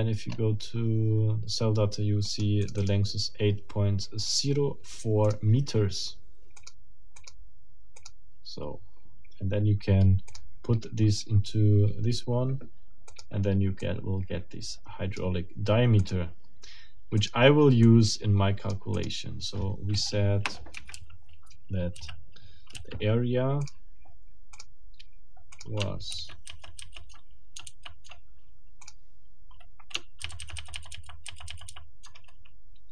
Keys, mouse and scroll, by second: 0.3 scroll up 1, 2.2 click, 5.2 click, 6.6 click, 7.2 click, 8.0 click, 13.1 click, 13.8 middle click, 13.9-15.4 drag, 16.0 click, 17.2 click, 17.8-19.2 drag, 20.7 Escape, 20.9 j, 21.9 i, 24.6 middle click, 25.6 ctrl+middle click, 26.1 ctrl+z, 30.2 ctrl+z.